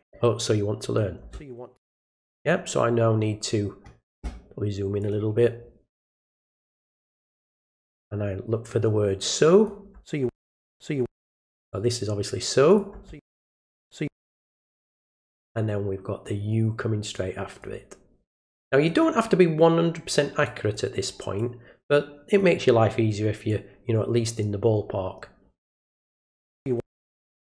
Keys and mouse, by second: 0.4-1.0 drag, 5.0 click, 6.5-7.6 drag, 8.7-9.7 drag, 11.7-12.8 drag, 14.6-16.2 drag, 17.1 click, 18.4 click, 20.4 click, 21.4-22.4 drag, 23.5-24.4 drag, 25.7-26.3 drag, 27.3 click.